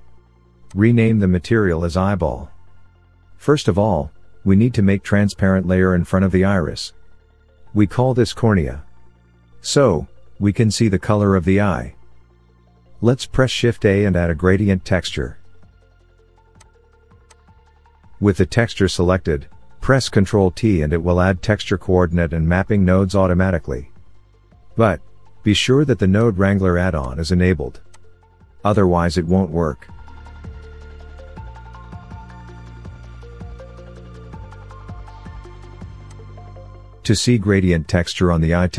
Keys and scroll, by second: 3.3 l, 12.4 l, 14.0 shift+a, 20.7 ctrl+t.